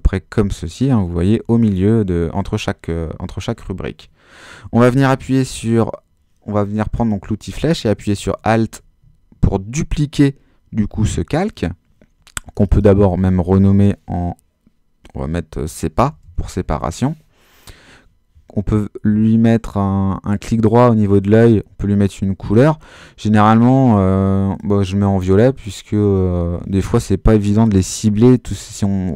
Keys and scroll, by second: 1.4 super++, 15.7-17.0 typing.